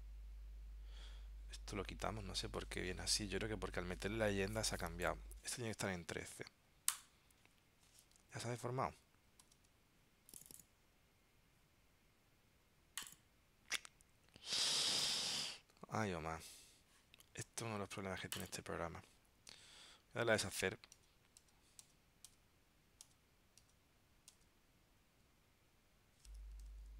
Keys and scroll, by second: 9.5 super+z, 19.6 super+z, 22.5 super+z, 23.2 super+z, 26.8 super+y.